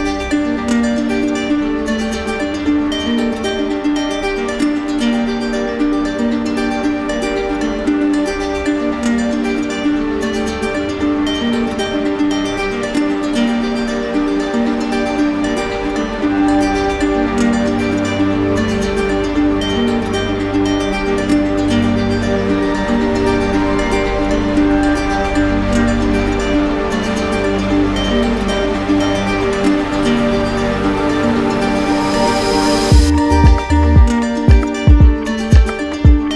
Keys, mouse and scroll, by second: 1.2 click, 2.8 click, 4.4 shift+click, 5.3 shift+click, 5.6 shift+click, 6.7 right click, 7.5 shift+click, 7.9 shift+click, 11.0 shift+click, 11.9 shift+click, 12.6 shift+click, 13.1 shift+click, 13.7 shift+click, 14.8 shift+click, 15.5 right click, 16.7 alt+right click, 17.5 right click, 18.1 right click, 18.2 z, 19.2 z, 20.3 click, 21.5 click, 24.7 alt+click, 25.5 ctrl+z, 28.8 alt+click, 31.0 alt+click, 31.8 shift+click, 32.4 shift+click, 32.7 right click, 34.1 shift+click, 34.6 shift+click, 35.4 shift+click, 36.1 shift+click.